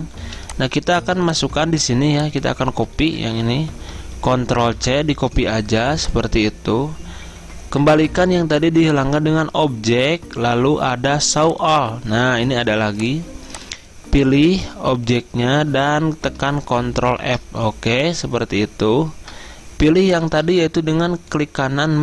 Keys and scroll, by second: 0.2-1.1 typing, 3.0 ctrl+z, 4.8 ctrl+c, 17.2 ctrl+f.